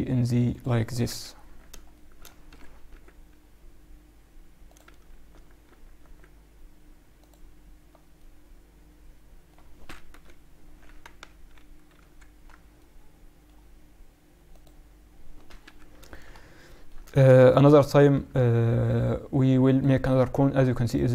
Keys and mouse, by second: 1.0 KP_1, 1.9 middle click, 2.4 g, 4.8 z, 5.2 z, 5.6 z, 5.9 z, 7.1-9.0 drag, 9.0-10.0 middle drag, 10.0 KP_1, 11.2 ctrl+1, 11.9 ctrl+2, 12.7-14.5 middle drag, 14.5-16.2 drag, 15.6 KP_7, 16.5 middle click, 18.7-20.7 drag.